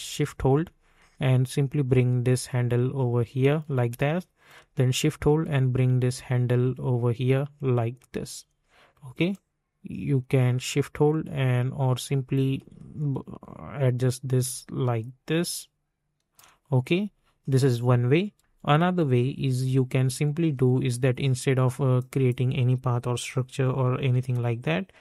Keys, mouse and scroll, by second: 4.4-9.3 drag, 9.3-18.4 drag, 18.4 ctrl+z, 21.9 click, 24.1 u.